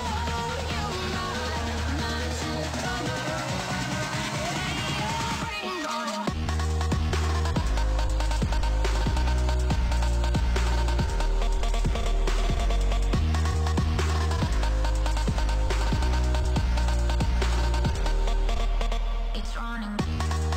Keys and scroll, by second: 13.0 ctrl+s.